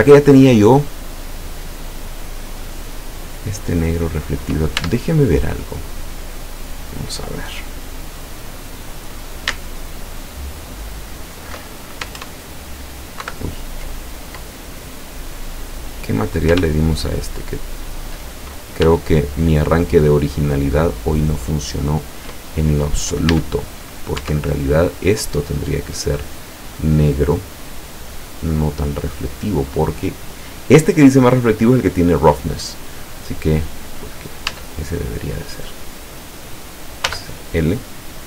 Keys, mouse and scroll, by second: 2.9 click, 4.9 Tab, 5.5 right click, 6.5 right click, 9.8 alt+shift+right click, 12.2 ctrl+KP_Add, 13.3 ctrl+KP_Subtract, 15.6-16.0 scroll up 2, 17.0 ctrl+shift+right click, 17.9 ctrl+shift+right click, 19.1 shift+right click, 20.3 shift+right click, 21.5 shift+right click, 23.3 a, 24.3 Tab, 24.8 right click, 25.5 right click, 28.6 scroll up 1, 29.3 click, 36.0 right click, 37.1 l, 38.0 scroll down 1.